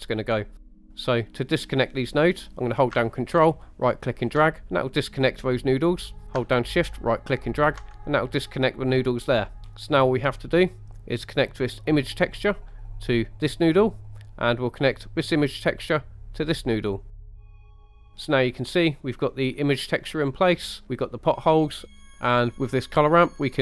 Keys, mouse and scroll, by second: 0.4 middle click, 0.7 scroll down 1, 0.9 middle click, 3.7 ctrl+right click, 6.9 ctrl+right click, 9.5 middle click, 9.6 scroll down 2, 10.3 middle click, 11.8-13.5 drag, 15.0-16.4 drag, 17.1-17.6 middle drag, 17.7 shift+middle click, 17.9 middle click, 18.5-19.3 middle drag, 19.8 scroll up 2, 20.4 middle click, 21.0-21.6 middle drag, 21.8 scroll up 1, 22.0 middle click, 22.1 ctrl+z, 23.5-23.6 drag.